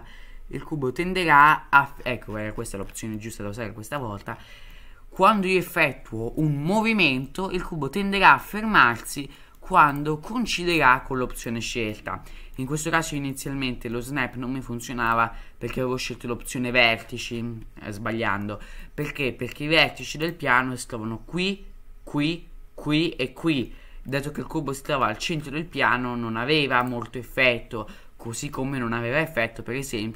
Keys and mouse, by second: 3.2-4.0 middle drag, 4.7 middle click, 7.3-8.4 middle drag, 9.4 middle drag, 11.8-12.5 middle drag, 13.1 middle click, 13.9 middle drag, 15.1-16.4 drag, 18.4-18.8 middle drag, 19.0 middle drag, 19.8 middle drag, 20.2 click, 23.7-24.1 middle drag, 25.0-25.5 middle drag, 26.9-30.1 drag.